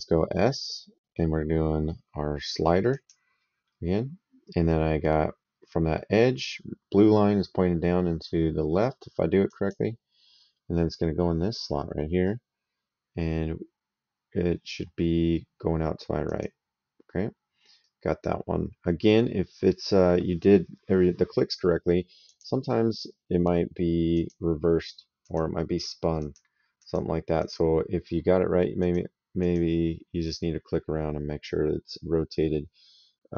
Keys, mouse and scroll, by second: 2.7 click, 9.3 click, 10.6 right click, 16.1 click, 17.6 right click, 19.2 middle click, 22.1 click, 23.9 click, 25.0 click, 28.6 click.